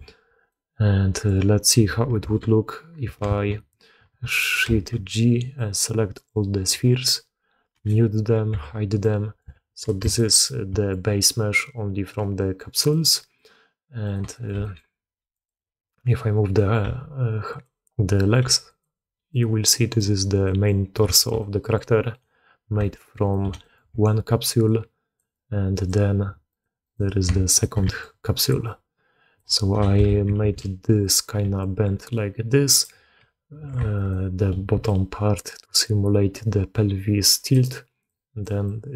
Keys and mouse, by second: 0.4-1.2 drag, 2.1 shift+h, 3.4 ctrl+z, 4.5 shift+g, 7.7 m, 8.4 h, 8.9-9.3 drag, 9.4 alt+a, 10.0 shift+drag, 10.3-10.8 drag, 12.8 drag, 14.2 click, 14.4 g, 16.4 click, 16.8 g, 18.1 click, 19.2 click, 19.5-19.9 drag, 20.3 drag, 21.0 shift+click, 21.3-21.7 drag, 22.1-22.7 drag, 23.5 click, 23.8 d, 23.9-25.1 drag, 25.1 d, 25.2-25.8 drag, 25.2 d, 26.4 click, 27.4 shift+middle click, 27.7 d, 27.9 click, 28.4 d, 28.6-29.3 drag, 28.6 d, 29.8 KP_3, 30.3 alt+a, 31.0-31.3 drag, 31.3 d, 31.5-32.7 drag, 32.7 d, 32.9 d, 33.1 d, 33.5 d, 33.9 shift+click, 34.6-38.5 d, 34.8-37.4 drag, 38.0 click, 38.5 click.